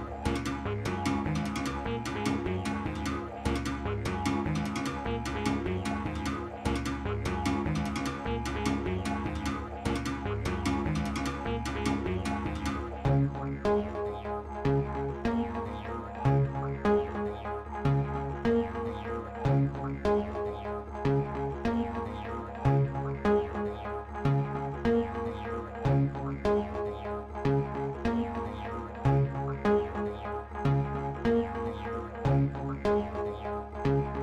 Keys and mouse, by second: 0.0-4.3 drag, 10.5-13.8 shift+drag, 18.7-22.0 alt+drag, 25.2 click, 31.1-34.2 alt+drag.